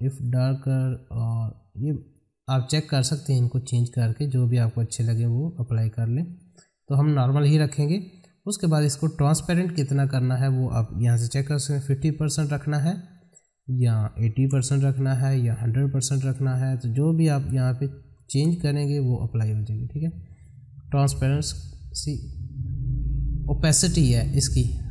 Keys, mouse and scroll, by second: 10.2 click, 11.5 Tab, 13.6 click, 14.7 Tab, 16.3 click.